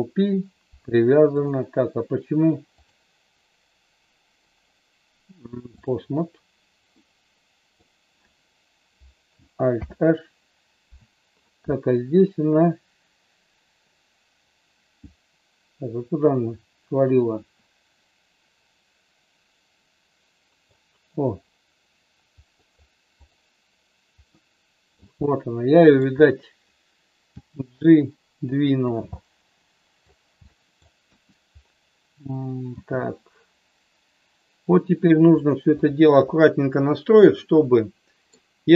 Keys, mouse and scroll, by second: 1.4 click, 2.9-6.0 drag, 7.0 middle click, 9.7 alt+h, 11.5-20.7 middle drag, 22.5 middle click, 23.3-24.6 drag, 24.6 middle click, 25.3 middle click, 27.3 g, 28.9 click, 29.2 middle click, 30.5 middle click, 31.0 KP_1, 32.8 g, 37.5 middle click.